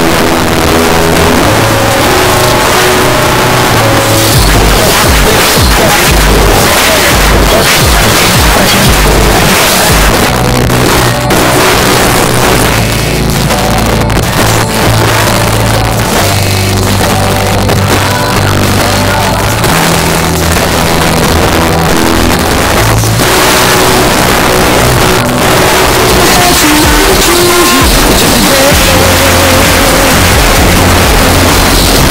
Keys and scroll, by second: 10.1 Page_Down.